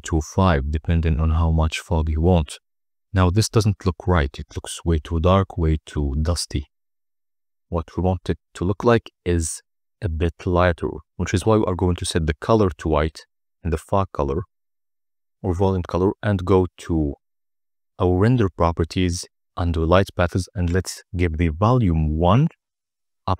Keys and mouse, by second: 3.0-4.2 middle drag, 9.8 g, 10.1 shift+z, 12.1 click, 13.7 click, 14.6 click, 16.4 KP_0, 20.8 click.